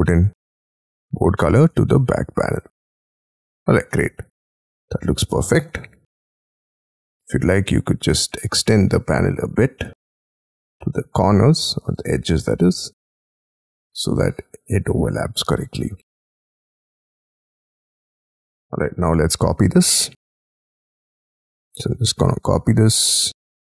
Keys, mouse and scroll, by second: 0.0 double click, 0.3 b, 1.2 space, 1.5 Escape, 1.9 Escape, 2.2 Escape, 2.4 Escape, 2.5-3.8 scroll down 24, 3.9 middle click, 6.0-7.3 scroll up 23, 7.7-8.0 scroll down 7, 8.2 double click, 8.5 double click, 8.9-9.3 scroll down 10, 9.5-10.0 scroll up 8, 18.5 middle click, 18.7-19.7 scroll down 29, 19.4 space, 20.4-20.7 scroll down 6, 20.7 m, 20.9-21.6 scroll up 14, 22.1-22.6 scroll up 9.